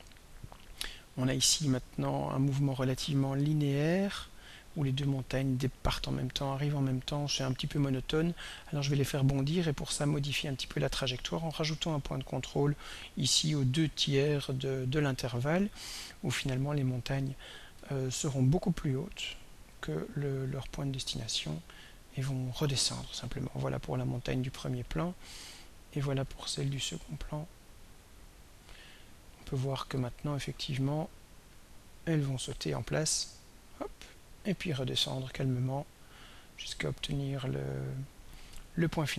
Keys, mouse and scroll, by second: 2.4-12.4 drag, 17.9-21.8 drag, 24.4 click, 26.3-28.4 drag, 30.0-38.7 drag.